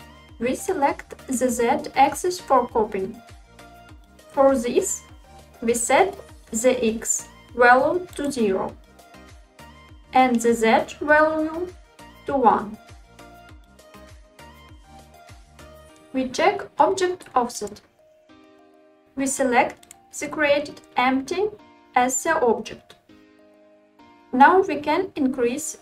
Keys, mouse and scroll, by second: 8.8-9.9 drag, 13.3-14.8 drag, 17.8 click, 19.9 click, 22.4-23.5 drag.